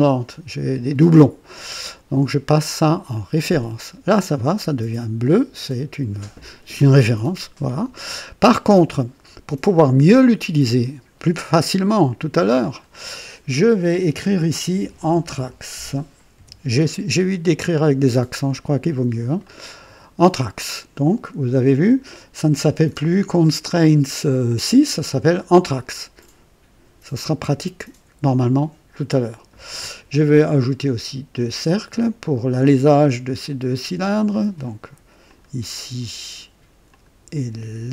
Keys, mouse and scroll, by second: 3.1 click, 12.5 click, 14.5-17.1 typing, 19.4 click, 21.7 scroll down 1, 31.3 click, 34.2 click, 35.2 click, 36.8 click.